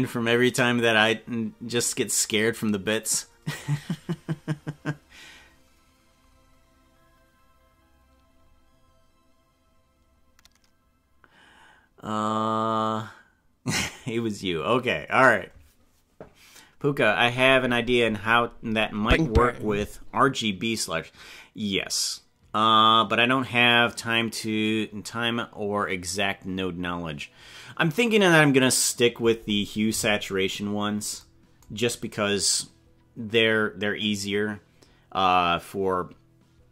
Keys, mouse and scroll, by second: 30.3-31.1 scroll down 9.